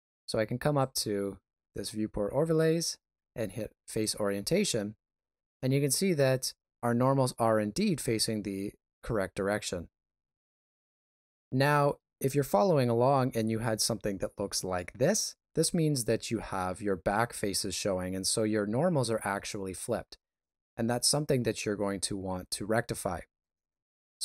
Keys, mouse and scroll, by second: 0.8 click, 8.0 middle click, 10.3 alt+a, 11.6 alt+a, 11.6 middle click, 16.4 middle click.